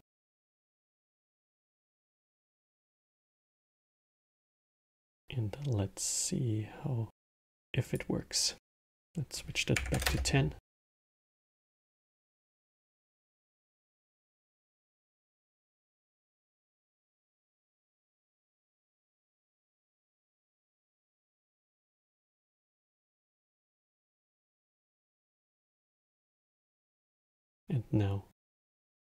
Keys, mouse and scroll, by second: 0.2-3.4 alt+middle drag, 7.6-11.2 drag, 11.2-12.4 alt+middle drag, 12.4 scroll, 13.6-15.7 drag, 15.7-19.2 alt+middle drag, 19.2 click, 21.0 shift+click, 21.5 shift+click, 22.2 shift+click, 22.6 shift+click, 23.4-24.2 alt+middle drag, 24.2 scroll, 24.7-25.9 alt+middle drag, 25.9 scroll, 26.4-29.0 alt+middle drag.